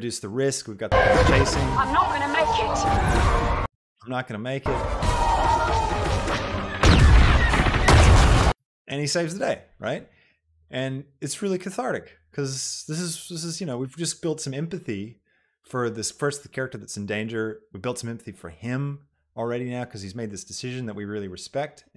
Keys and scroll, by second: 0.9 space, 3.8 space, 8.6 space.